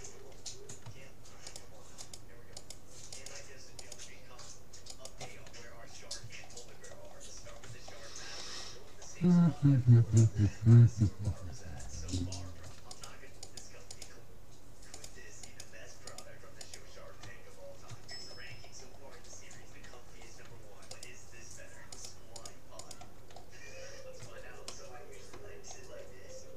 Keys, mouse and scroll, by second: 0.0 middle click, 1.0 middle click, 1.6-6.6 right drag, 8.0-9.6 middle drag, 12.6 middle click, 13.0-17.6 right drag, 17.6-21.0 middle drag, 21.0-24.6 right drag, 24.6-26.5 middle drag.